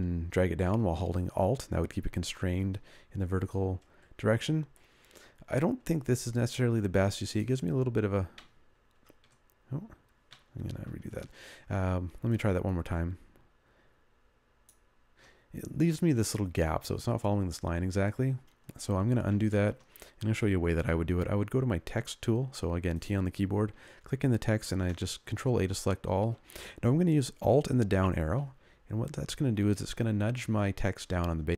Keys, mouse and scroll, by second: 2.5 ctrl+click, 9.1 ctrl+z, 10.9 ctrl+y, 12.7 ctrl+click, 19.5 ctrl+z, 20.9 t, 24.5 ctrl+a, 28.5 alt+Down, 28.6 alt+Down, 29.0 alt+Down, 29.3 alt+Down, 29.6 alt+Down, 29.8 alt+Down, 30.1 alt+Down, 30.6 alt+Down, 30.9 alt+Down, 31.2 alt+Down, 31.3 alt+Down.